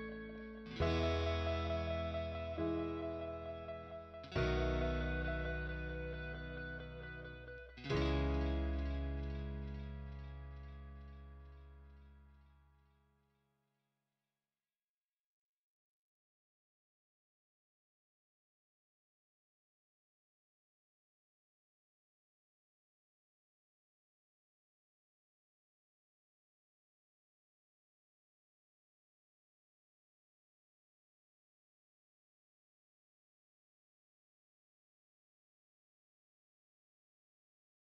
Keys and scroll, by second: 0.8 Escape, 2.0 t, 2.4 space, 6.4 Escape, 7.5 t, 7.9 space, 9.2 Escape, 10.3 Delete, 13.7 o, 14.0 space, 15.2 1, 15.6 Return.